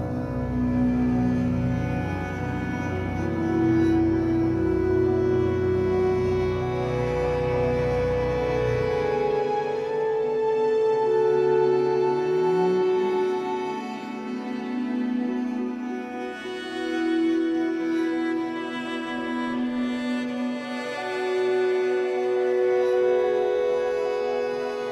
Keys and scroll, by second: 3.6 Escape, 4.0 3, 8.6 alt+shift+x, 8.9 Escape, 12.9 b, 14.3 ctrl+z, 19.0 b, 21.4 b.